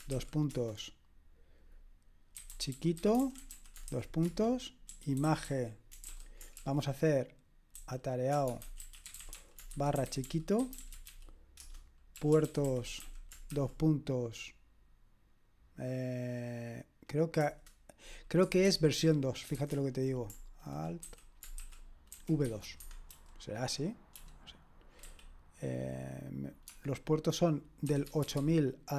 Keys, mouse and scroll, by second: 0.0-0.6 typing, 2.1-14.0 typing, 17.4 Return, 18.4 Escape, 19.0-19.5 typing, 21.1-25.5 typing, 22.7 Escape, 27.6-28.9 typing.